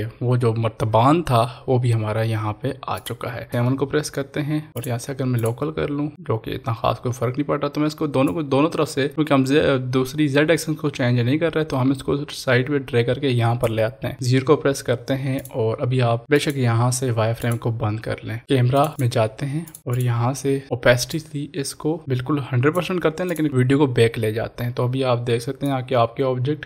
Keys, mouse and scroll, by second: 3.1 click, 4.7 click, 4.8 click, 8.2 click, 8.2-15.3 drag, 20.6-21.2 scroll down 1, 21.2-23.3 drag, 26.0-26.6 drag.